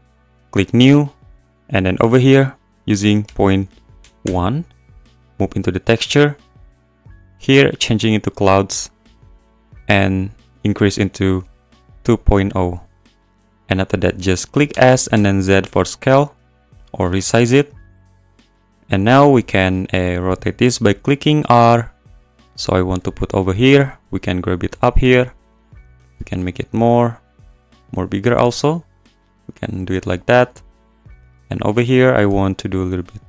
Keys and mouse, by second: 1.5-4.3 drag, 5.9 click, 7.5-8.5 drag, 9.7-11.9 drag, 14.7 s, 15.1 z, 16.8 click, 18.9 `, 20.6-26.1 typing, 22.9 click, 27.4 s, 29.3 click, 32.2 r.